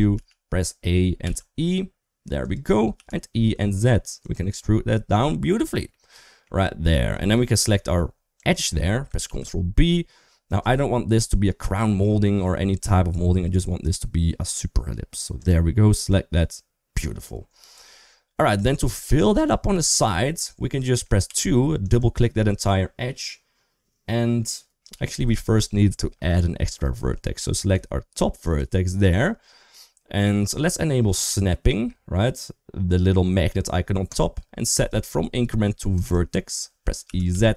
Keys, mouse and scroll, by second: 0.0 a, 1.0 e, 2.8 e, 5.8 middle click, 7.3 2, 8.2 click, 9.1 ctrl+b, 15.2 click, 18.4 KP_3, 18.7 KP_1, 20.2 middle click, 21.1 2, 21.6 click, 21.8 click, 27.5 1, 28.2 click, 33.9 click, 34.5-36.3 drag, 36.9 e.